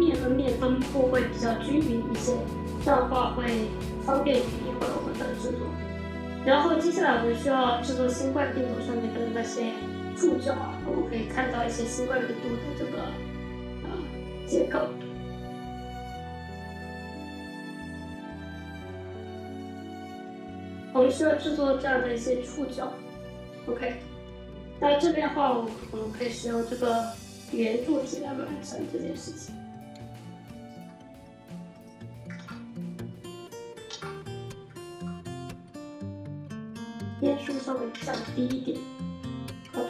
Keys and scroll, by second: 32.2 alt+w, 33.7 alt+w, 37.8 6, 37.9 Return.